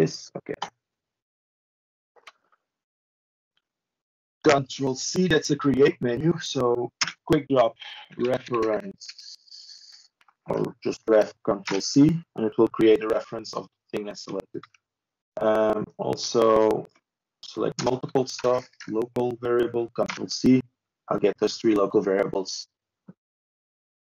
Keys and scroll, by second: 17.0 ctrl+space, 17.8 ctrl+t.